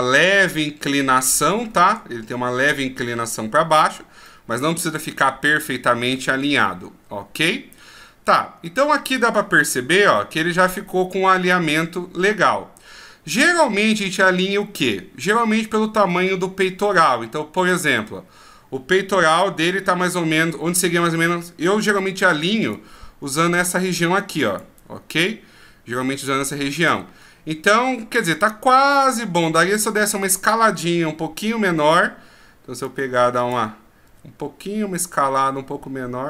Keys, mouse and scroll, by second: 0.8 right click, 1.6-1.9 shift+scroll up 5, 4.2 middle click, 6.0 scroll down 4, 6.6 middle click, 8.3-8.7 scroll down 1, 8.7 middle click, 9.6 KP_1, 10.5-11.6 shift+scroll up 14, 12.1 scroll down 1, 13.1 scroll up 1, 17.6 right click, 22.7 click, 22.7 d, 29.9 right click, 32.8 click, 34.0 s.